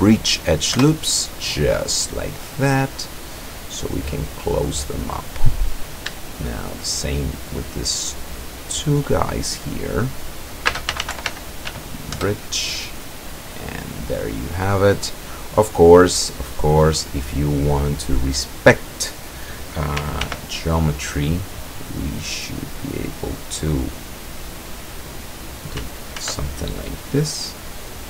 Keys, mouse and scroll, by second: 0.8 Return, 2.6-4.8 middle drag, 5.8 right click, 6.5 shift+right click, 7.5 shift+right click, 8.3 shift+right click, 9.1-9.9 shift+middle drag, 9.9 scroll up 2, 10.8-11.7 typing, 12.2 Return, 14.0-17.1 drag, 17.5 click, 20.3 ctrl+r, 21.6 click, 25.0 click, 26.2 ctrl+r, 26.7 ctrl+click.